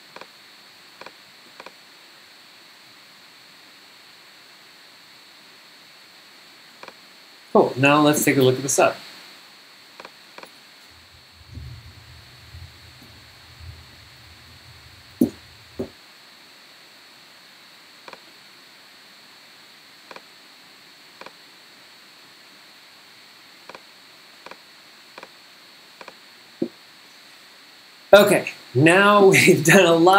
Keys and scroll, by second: 8.4 super+Tab, 10.5 super+Tab, 11.4 super+g, 11.5-15.8 typing.